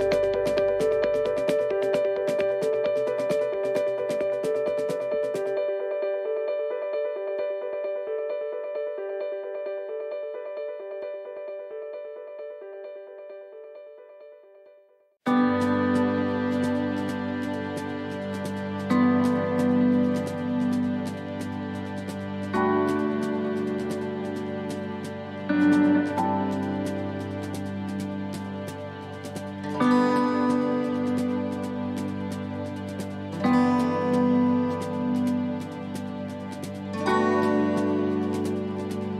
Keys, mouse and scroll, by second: 36.0 shift+d, 38.4 click.